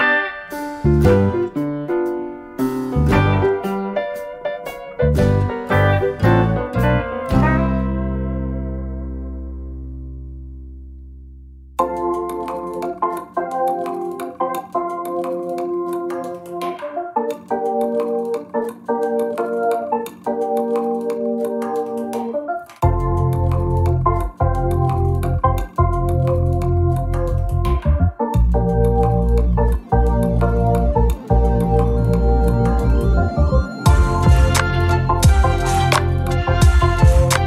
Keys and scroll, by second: 6.8 ctrl+d, 9.0 ctrl+d, 11.1 ctrl+-, 13.5 ctrl+d, 15.4 ctrl+d, 18.0 ctrl+-, 20.3 ctrl+d, 21.6 ctrl+d, 23.6 ctrl+-.